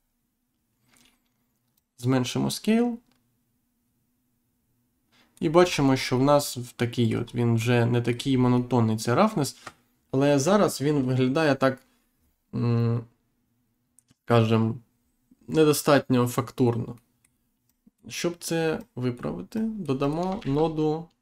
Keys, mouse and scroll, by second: 1.7 click, 5.6-6.0 scroll down 1, 6.1 middle click, 7.1-7.5 scroll up 1, 7.5 middle click, 8.4 scroll down 1, 8.6 middle click, 10.3-10.7 scroll down 1, 16.8 middle click, 18.7 click, 20.3 shift+a.